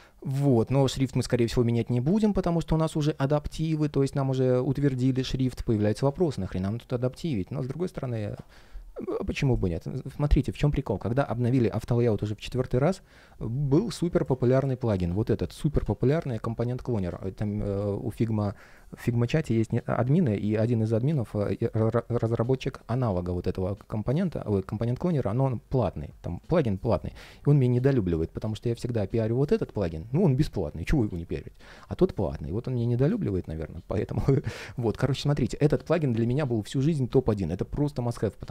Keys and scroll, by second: 5.8 ctrl+shift+3, 8.1 ctrl+shift+3, 15.6 super+/.